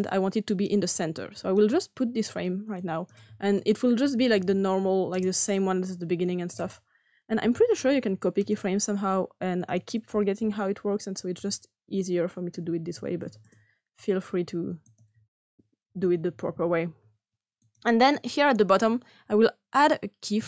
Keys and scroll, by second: 3.9-4.2 typing, 5.1 Return, 6.9-8.3 typing, 11.0-12.9 typing, 13.5 Return, 15.8-16.7 typing.